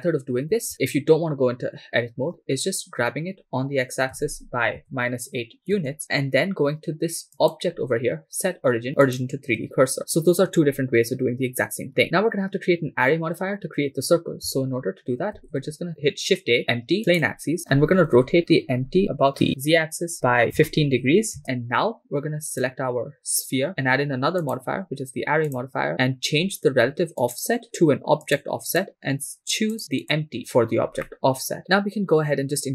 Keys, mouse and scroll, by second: 0.7 ctrl+z, 3.1 g, 4.8 x, 4.8 -, 5.8 Return, 5.8 8, 6.2 shift+s, 7.4-9.3 drag, 15.4 shift+a, 18.2 r, 19.0 z, 20.6 1, 21.4 5, 21.4 Return, 22.5 right click, 24.4-25.8 drag, 26.3-26.8 scroll down 2, 27.3 click, 28.2 click, 28.7 drag, 29.8 click, 31.1 scroll down 1, 31.1-31.6 middle drag.